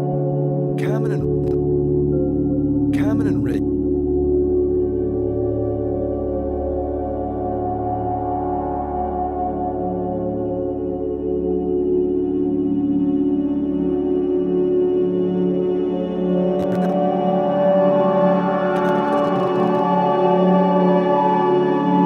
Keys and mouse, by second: 1.1-2.7 typing, 1.4 click, 4.3-5.1 typing, 5.3 alt+shift+click, 6.2 alt+click, 6.7 alt+shift+click, 7.1 alt+click, 8.2 -, 12.0 click, 13.4 alt+shift+click, 14.1 click, 16.6-19.7 drag.